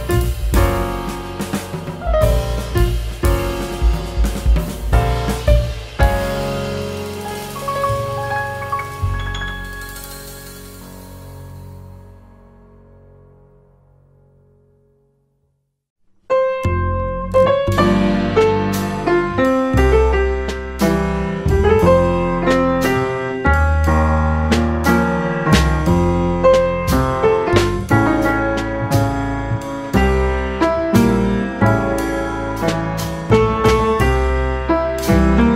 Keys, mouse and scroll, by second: 0.2 middle click, 0.5 Tab, 0.7-1.1 middle drag, 1.1 s, 2.4 middle drag, 2.6 Tab, 2.8 middle click, 3.2 Tab, 3.5 Tab, 4.2 s, 5.3 ctrl+z, 5.9 ctrl+z, 6.8 s, 7.8 Tab, 8.0 middle click, 8.2 scroll down 1, 8.3 click, 8.6-8.9 middle drag, 8.9 Tab, 9.2 middle drag, 9.4-9.8 scroll up 5, 9.8 click, 10.1 click, 10.4 right click, 10.9 click, 11.2 middle drag, 11.5-11.9 scroll down 3, 11.9 click, 12.2-13.0 middle drag, 13.0 g, 14.6 middle click, 15.3 click, 15.7 Tab, 16.0-17.3 scroll up 4, 17.4 Tab, 18.1 s, 20.3 scroll down 2, 20.5-22.5 middle drag, 22.6 middle click, 22.8 g, 26.3 click, 26.9 s, 28.1 Tab, 28.5-29.5 scroll down 1, 29.5 scroll down 2, 29.6-30.1 scroll up 3, 30.1 click, 30.7 middle click, 31.1-31.6 scroll down 2, 31.6 shift+r, 32.1 Tab, 32.6 ctrl+r, 33.4 middle click, 34.0-35.3 drag, 35.4 shift+click.